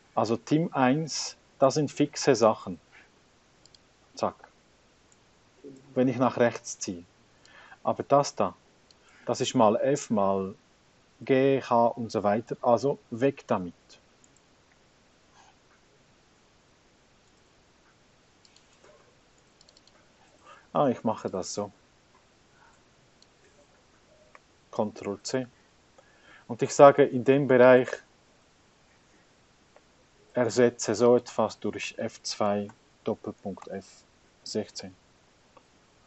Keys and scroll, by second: 5.3 F4, 13.1 F4, 13.3 F4, 13.7 F4, 14.8 Return, 25.4 Escape, 28.7 h, 29.9 ctrl+v, 32.0-35.4 typing.